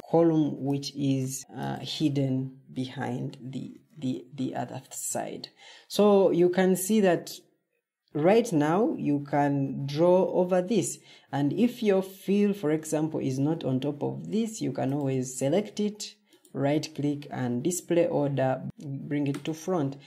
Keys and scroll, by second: 3.4 Escape.